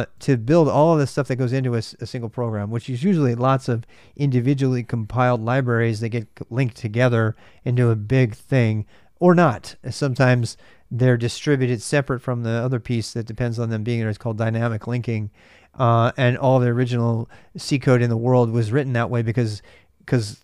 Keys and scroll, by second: 1.2-2.0 typing.